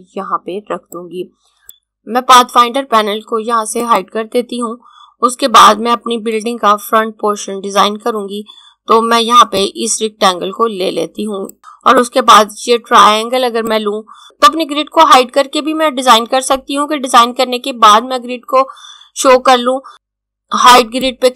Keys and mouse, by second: 3.7 click, 9.4 click, 12.0 click, 19.9 click, 20.8 click.